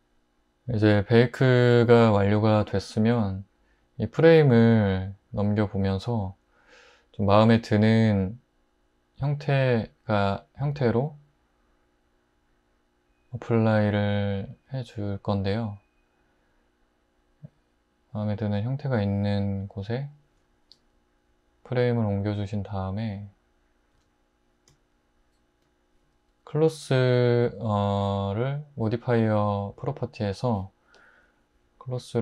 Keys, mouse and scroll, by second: 24.0 `.